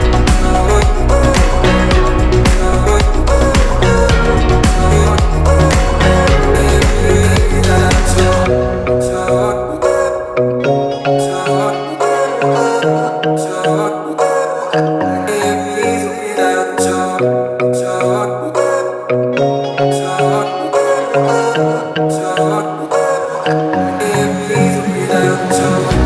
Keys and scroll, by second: 3.0 space, 5.6 m, 7.0 Left, 12.1 space, 14.1 m, 17.9 Left, 20.7 space, 22.7 m, 25.0 Left, 25.4 Right.